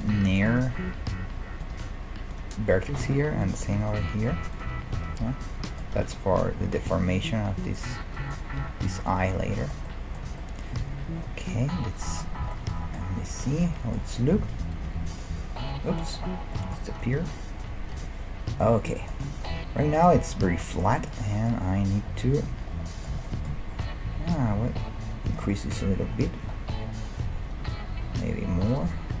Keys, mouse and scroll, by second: 0.2 g, 0.9 g, 2.3-5.7 right drag, 3.7 g, 4.7 g, 5.5-7.6 middle drag, 6.0 a, 6.5-8.5 drag, 8.6 g, 9.8-11.5 middle drag, 10.3 a, 13.3 KP_5, 14.8 KP_1, 17.2 a, 18.0 KP_Decimal, 18.6-21.4 middle drag, 24.5 s, 27.5 s, 28.3 middle click, 28.5-29.2 scroll down 1.